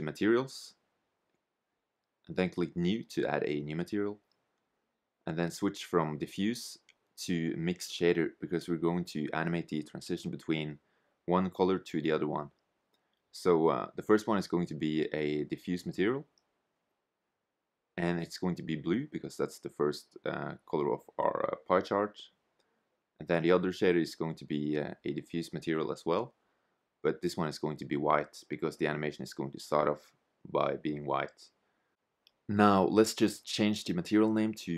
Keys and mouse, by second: 1.6 click, 3.6-7.1 drag, 11.4-14.5 drag, 17.9-19.8 drag, 22.4-24.3 drag, 31.5-33.3 drag.